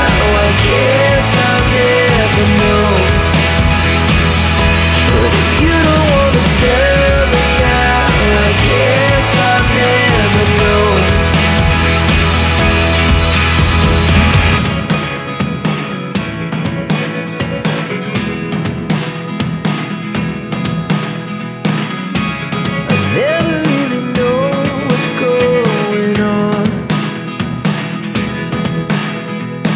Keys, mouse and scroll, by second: 2.2 click, 7.6 click, 10.7 click, 11.9-12.7 scroll up 1, 13.1 scroll down 1, 14.6 click, 16.3 click, 20.7 click, 25.5 click, 28.7 click.